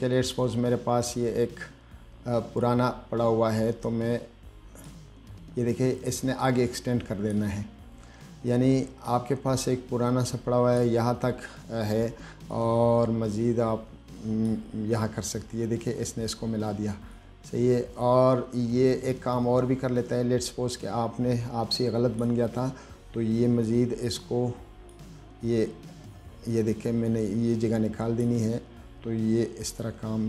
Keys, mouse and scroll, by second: 0.4 click, 2.9-5.1 drag, 6.8-7.6 drag, 9.3-11.1 drag, 12.8-14.7 drag, 17.4-22.5 drag, 23.9-25.2 drag, 26.8-28.5 drag, 30.0-30.2 drag.